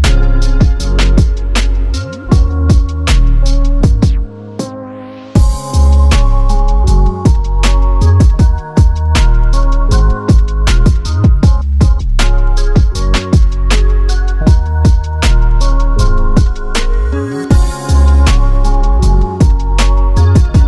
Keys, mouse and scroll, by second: 1.0 ctrl+shift+h, 2.6 click, 14.0 shift+click, 15.2 ctrl+d, 16.9 click.